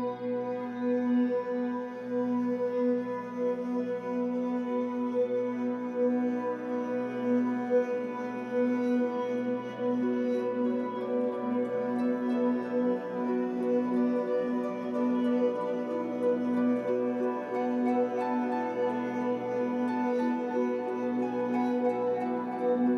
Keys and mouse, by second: 0.8 click, 2.1-5.2 alt+drag, 6.2 click, 7.5 click, 8.3 space, 9.5 space, 11.7-13.9 alt+drag, 14.5 click, 15.4 drag, 15.8 space, 17.0 space, 18.5 /, 19.1 space, 20.0 space, 21.1 /.